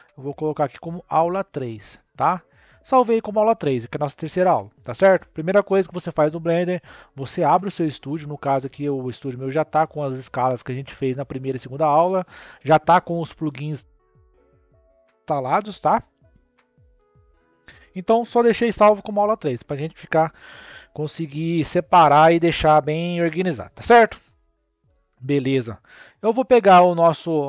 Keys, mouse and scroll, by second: 13.1 n, 15.9 n, 26.2-26.6 scroll down 4, 26.6-27.4 scroll up 3.